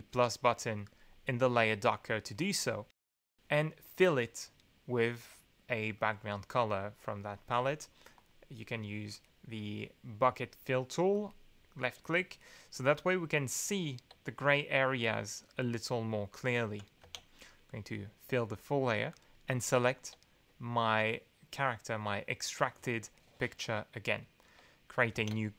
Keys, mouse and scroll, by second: 0.8 click, 5.9-6.9 drag, 7.1 click, 8.1 click, 11.1 click, 16.6 ctrl+z, 17.0 ctrl+f, 19.1 click, 25.1 ctrl+g.